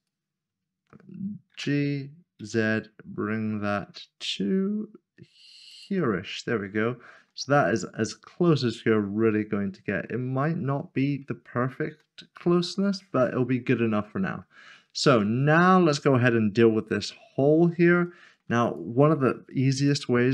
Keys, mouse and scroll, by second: 2.4 typing, 5.7 ctrl+click, 6.3-6.7 scroll up 1, 7.0 shift+middle click, 7.7 middle click, 11.4 scroll down 1, 12.0 middle click, 14.9 shift+middle click, 16.9 scroll up 1, 18.0 shift+middle click, 19.9 click.